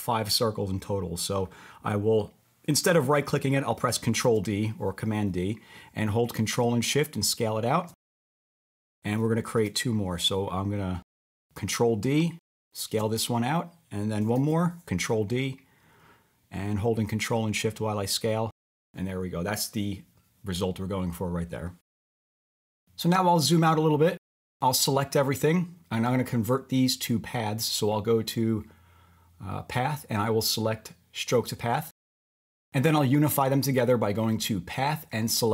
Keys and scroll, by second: 4.3 super+d, 9.5 super+d, 14.3 super+d.